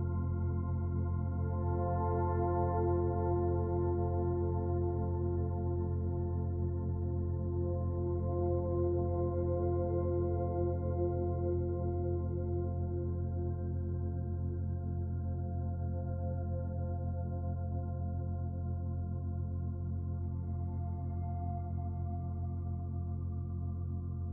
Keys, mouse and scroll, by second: 10.9-11.2 scroll up 2, 11.9 scroll up 1, 12.1 shift+middle click, 14.0 click.